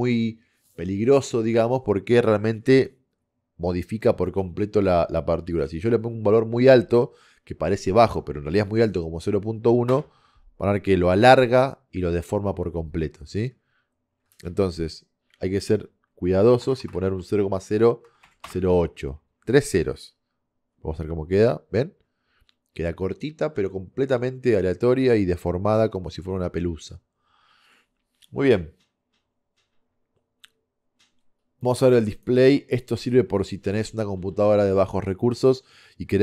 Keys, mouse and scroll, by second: 13.0 middle click, 13.7-16.9 middle drag, 16.9 KP_0, 21.5-25.5 middle drag, 25.8 middle click, 31.6-34.8 drag.